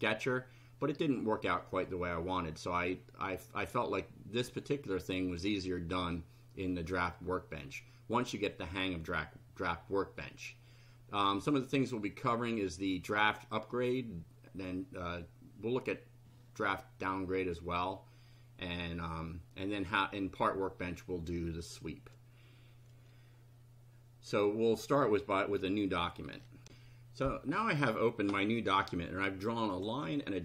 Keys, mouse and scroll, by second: 26.6 ctrl+r, 29.7 click.